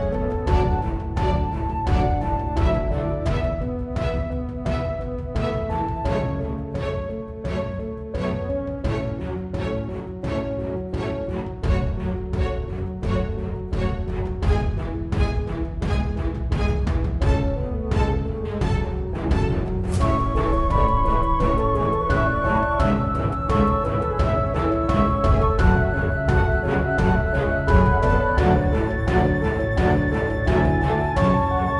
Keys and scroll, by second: 22.7 Delete, 25.9-28.3 typing, 28.5 Return.